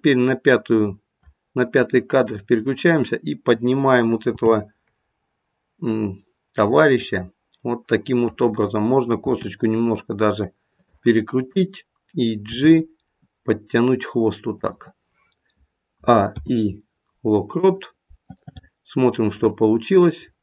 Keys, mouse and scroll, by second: 4.4 g, 9.2 r, 11.3 click, 12.4 g, 15.9 a, 16.3 i, 19.4 click.